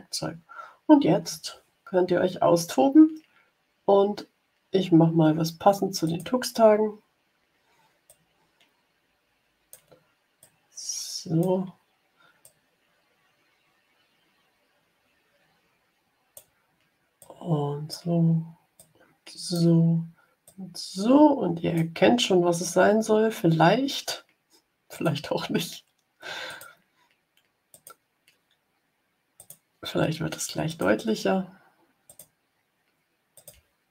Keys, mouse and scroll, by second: 5.9 click, 8.0-9.8 drag, 10.3-11.5 drag, 12.3-16.4 drag, 17.1 click, 18.7 click, 20.3-21.8 drag, 24.8 click, 26.4 click, 27.6 click, 29.3 click, 30.6 click, 32.0 click, 33.3 click.